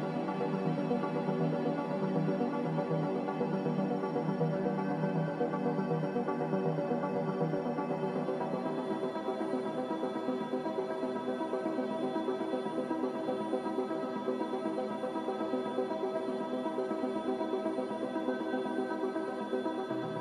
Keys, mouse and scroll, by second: 5.1 Delete, 6.0 Delete, 11.5 Delete, 12.4 a.